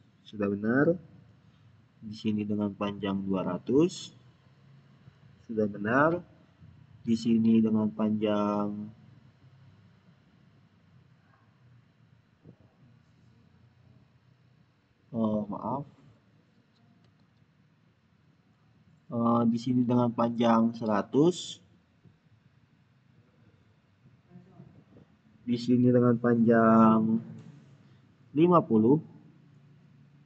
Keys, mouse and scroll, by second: 2.4 click, 2.6 click, 7.4 click, 16.7 click, 16.9 ctrl+z, 19.0 click, 21.2 click, 23.3 click, 27.2 click.